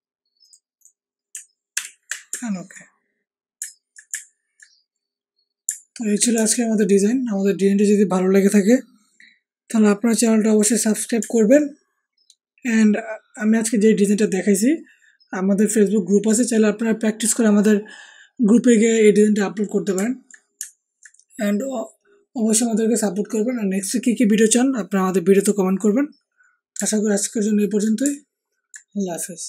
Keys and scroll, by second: 1.7 ctrl+;, 2.2 ctrl+alt+;.